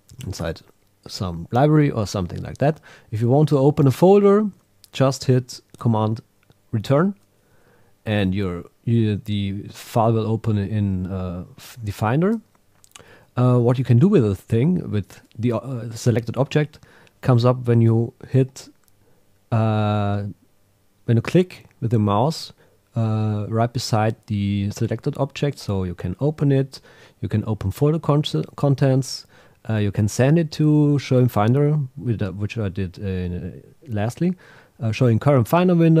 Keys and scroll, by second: 0.2 Right, 6.7 super+Return.